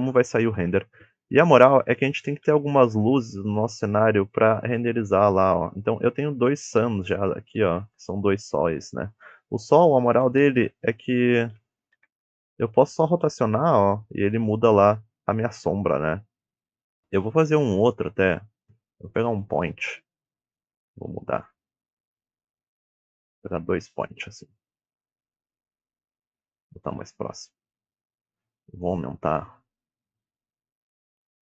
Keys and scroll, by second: 5.1 r, 9.5 r, 12.3 ctrl+Tab, 13.0 r, 20.4 g, 27.3 KP_7, 27.5 g, 29.2-31.4 typing, 29.7 Return, 30.5 Return.